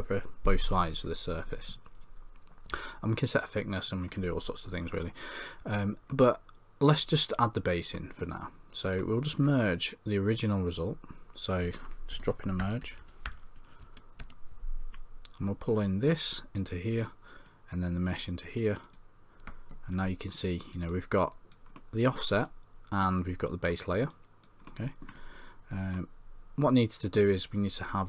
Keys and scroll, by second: 12.6 Tab.